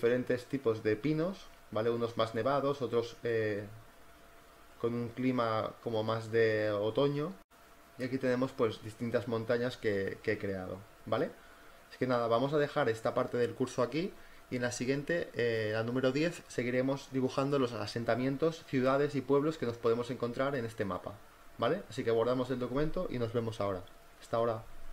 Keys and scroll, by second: 11.8 v, 15.2 z, 16.3 space, 24.2 z.